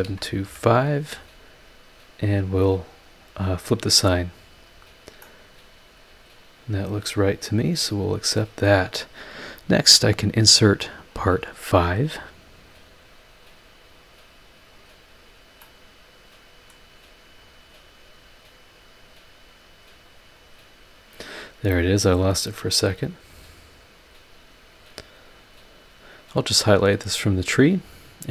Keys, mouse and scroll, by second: 0.0-0.4 typing, 3.6 click, 4.8 scroll down 2, 5.2-7.6 middle drag, 8.2 click, 11.1 click, 13.5 click, 14.7 click, 15.6-16.9 middle drag, 17.4 click, 20.4 click, 21.2-21.7 scroll up 4, 21.7 click, 22.9 click, 23.3 click, 23.9 click, 24.8 click, 25.3 click, 26.5 click.